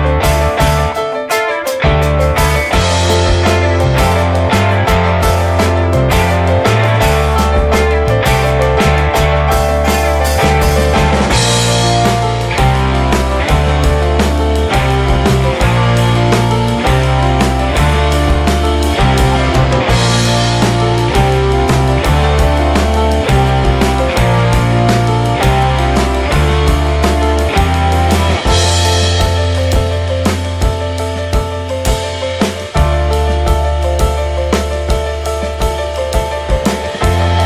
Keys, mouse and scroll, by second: 0.9 middle click, 1.4 click, 1.7-2.4 middle drag, 2.4 click, 2.6 click, 2.8 ctrl+a, 3.5 middle drag, 4.1 middle click, 4.2 scroll up 1, 4.3 click, 4.6 middle click, 5.2 click, 5.6 s, 6.8 click, 7.0 middle click, 7.9 click, 9.0 click, 9.8 click, 10.1 middle click, 10.5 click, 10.8 shift+middle click, 11.3 click, 11.5 click, 13.4-15.8 drag, 16.1 shift+middle click, 16.4-17.0 scroll up 2, 17.9-28.2 drag, 28.2 scroll down 2, 28.5 middle click, 28.6 scroll up 2, 28.9 shift+middle click, 29.5 alt+z, 29.8 middle click, 30.5 click, 30.7 scroll down 3, 30.8 shift+middle click, 31.5 click, 31.7 scroll up 2, 32.0-37.4 middle drag.